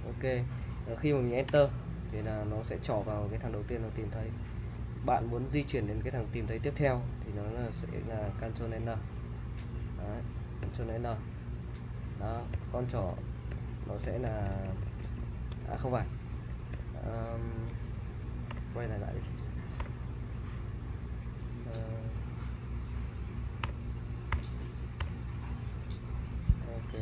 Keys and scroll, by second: 1.5 Return, 8.7 ctrl+n, 10.6 ctrl+n, 12.5 ctrl+n, 13.5 ctrl+n, 14.0 ctrl+n, 14.3 ctrl+n, 16.8 n, 18.5 u, 19.8 u, 23.6 u, 24.3 u, 25.0 u, 26.5 Escape.